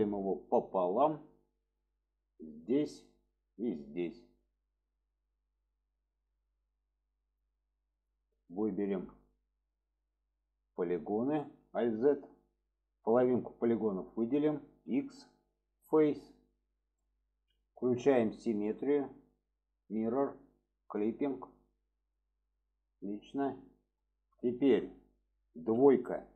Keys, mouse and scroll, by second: 2.7 click, 3.1 middle click, 4.9 click, 5.2-6.3 middle drag, 8.1 click, 11.3 alt+z, 12.2-13.7 drag, 17.0-17.6 middle drag, 18.3-19.9 drag, 20.8 click, 21.3-21.7 middle drag, 22.2 middle click, 23.0-24.0 middle drag, 24.5 shift+middle click.